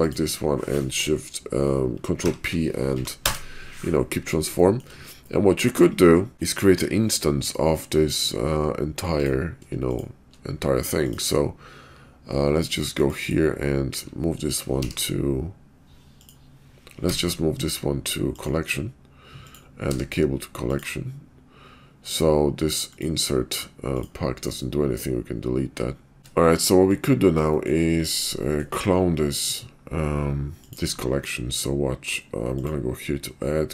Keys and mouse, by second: 2.1 ctrl+p, 4.6 shift+middle click, 5.3-5.6 middle drag, 9.2-9.7 drag, 11.0 click, 13.0-14.0 drag, 14.8 m, 17.0 m, 19.8 m, 22.8 click, 23.9 click, 24.4-26.2 drag, 26.2 shift+middle click, 27.5 middle drag, 28.4 shift+middle drag, 30.6 click, 32.5-33.7 drag.